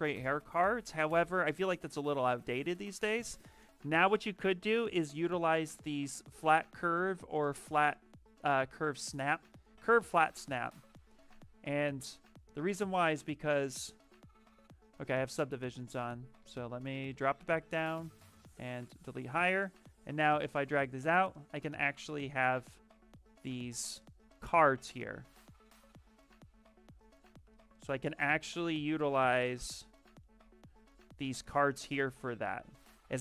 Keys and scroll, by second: 0.5 b, 3.0 c, 15.1 ctrl+z, 17.0 shift+d, 17.2 shift+d, 24.6 ctrl+z, 27.1 shift+f.